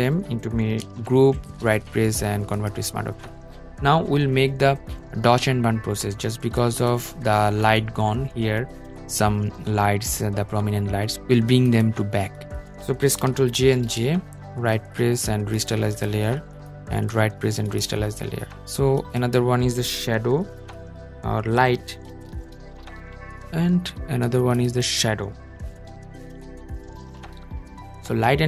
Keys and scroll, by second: 12.6 super+j.